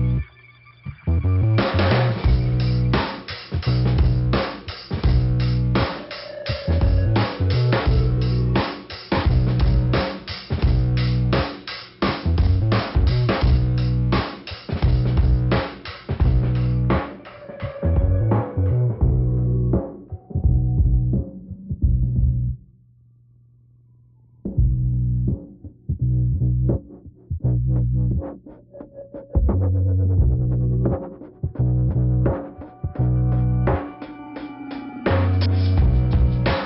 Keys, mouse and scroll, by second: 0.0 click, 1.4 click, 2.7 click, 4.2 click, 5.2 scroll down 1, 6.8 click, 8.0 click, 8.8 click, 10.0 click, 11.7 click, 13.1 scroll down 2, 15.0 click, 16.3 click, 16.7 click, 17.4 scroll down 1, 18.0 click, 19.6 click, 20.8 click, 22.5 click, 22.8 click, 24.0 click, 25.1 click, 26.4 click, 27.7 click, 30.5 click, 31.8 click, 33.0 click, 33.5 click, 34.5 click, 34.7 click, 35.6 click, 36.2 click.